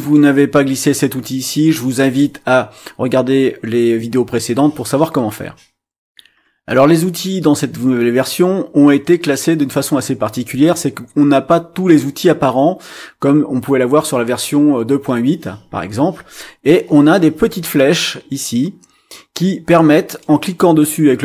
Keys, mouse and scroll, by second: 6.1 click, 20.2-21.2 drag.